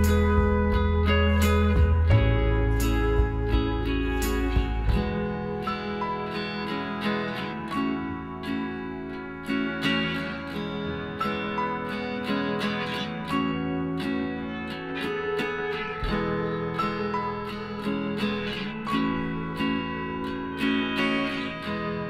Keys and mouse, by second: 0.5-4.2 middle drag, 2.2 z, 4.1 KP_Decimal, 4.8 middle click, 5.1-6.7 middle drag, 9.1 click, 10.2-12.5 middle drag, 13.1 Tab, 13.9 a, 15.6-17.6 right drag, 17.2 m, 21.5-22.0 drag.